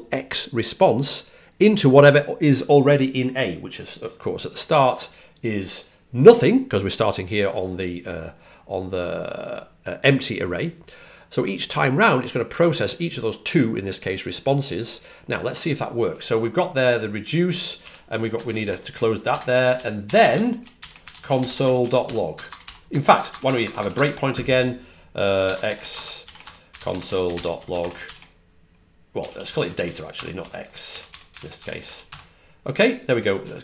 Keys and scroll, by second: 17.7-18.7 typing, 20.1-23.3 typing, 25.3 typing, 26.6-33.6 typing.